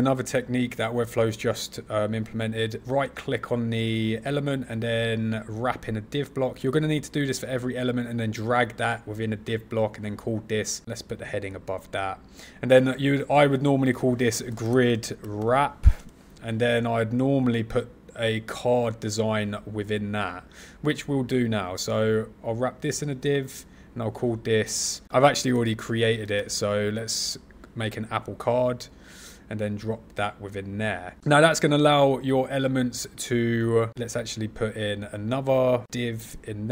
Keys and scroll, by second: 14.9 shift+-, 26.5 shift+-.